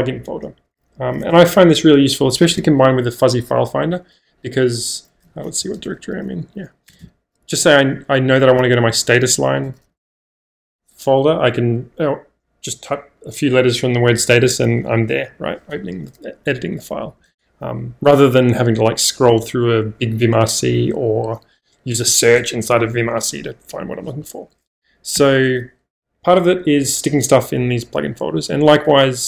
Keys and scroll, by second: 5.0-7.0 typing, 8.2-10.4 typing, 14.8 Return, 17.2 -, 25.1 -, 28.3-29.2 typing.